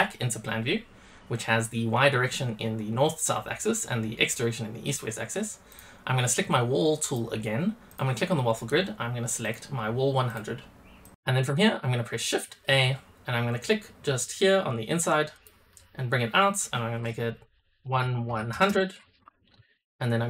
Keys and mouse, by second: 5.6 click, 6.9 click, 7.8-10.2 drag, 11.0 click, 12.6 shift+a.